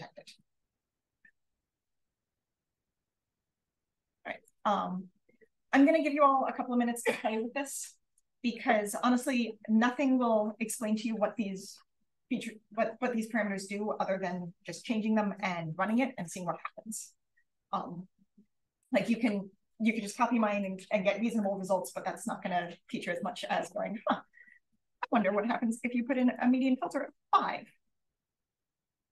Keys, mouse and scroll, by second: 0.3 1, 7.0-7.7 scroll down 1, 7.7 click, 24.6 click, 26.1 click, 27.0 5, 27.9 click, 28.7 click.